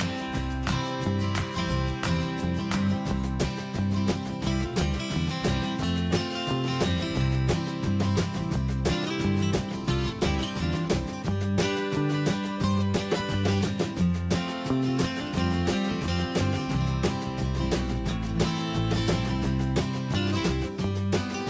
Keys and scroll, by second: 17.5 ctrl+a.